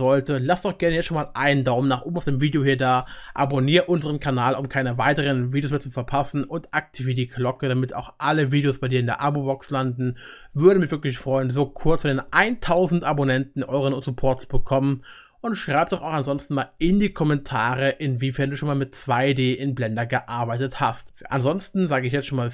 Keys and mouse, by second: 5.0-12.0 middle drag.